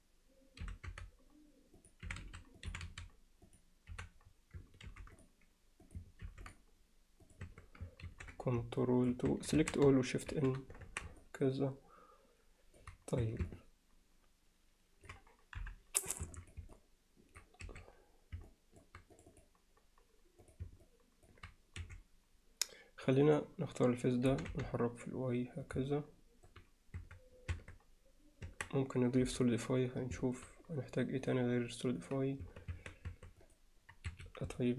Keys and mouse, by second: 2.1 e, 2.7 e, 3.9 f, 4.9 ctrl+r, 7.5 Tab, 8.1 ctrl+2, 8.8 middle click, 9.3 Tab, 9.6 a, 10.4 shift+n, 10.9 Tab, 11.2-12.8 alt+middle drag, 13.3 Tab, 13.5-15.1 alt+middle drag, 15.6 KP_Divide, 16.4 middle click, 16.7-17.4 middle drag, 17.6 2, 18.5-18.8 alt+middle drag, 19.2 click, 20.4 click, 20.9 alt+middle click, 21.8 3, 23.1 click, 24.3 g, 25.9-26.5 alt+middle drag, 27.0 Tab, 27.6 Tab, 28.5 Tab, 29.3 KP_Divide, 30.2 alt+middle click, 31.2 click, 32.0 click, 32.5 Tab, 32.8 Tab, 33.1 Tab, 33.6-34.5 right drag, 34.6 middle click.